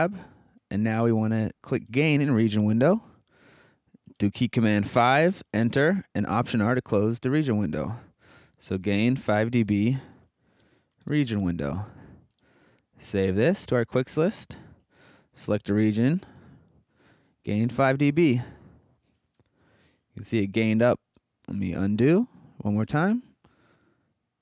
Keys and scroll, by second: 4.8 5, 5.4 Return, 6.3 alt+r, 7.8-11.8 typing, 21.6 super+z.